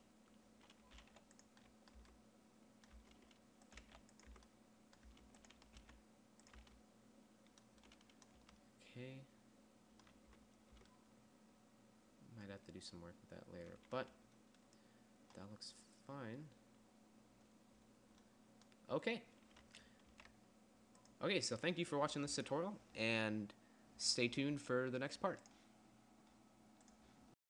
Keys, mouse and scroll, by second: 1.4 g, 2.4 Tab, 3.4 Tab, 4.2 g, 4.8 Tab, 5.5 Tab, 6.3 g, 7.1 Tab, 8.9 a, 10.7 Tab, 11.2 Tab, 20.6 ctrl+s.